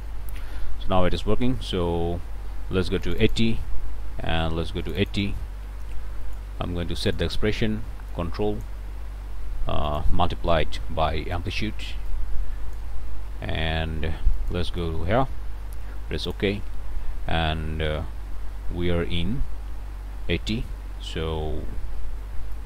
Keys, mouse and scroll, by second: 0.5 click, 1.5 click, 3.0 click, 4.8 click, 6.2 click, 7.1 click, 8.1 ctrl+click, 9.9 ctrl+click, 10.7 *, 12.1 ctrl+click, 14.4 click, 14.8 BackSpace, 16.2 click, 17.8 scroll up 1, 22.5 click.